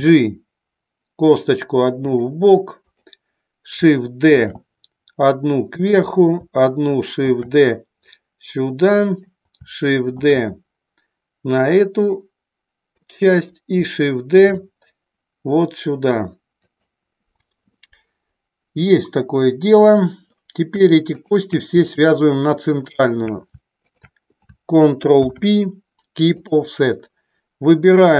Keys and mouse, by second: 2.8 click, 4.3 shift+d, 5.7 click, 9.0 click, 10.1 shift+d, 13.0 click, 14.3 shift+d, 16.6 click, 21.1 shift+click, 21.8 shift+click, 23.7 shift+click, 25.1 ctrl+p.